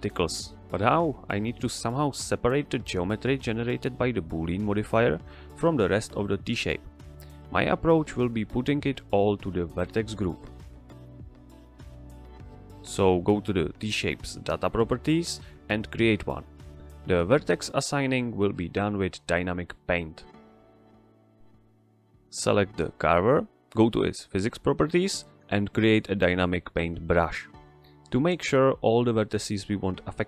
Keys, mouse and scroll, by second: 12.8 click, 22.2 click.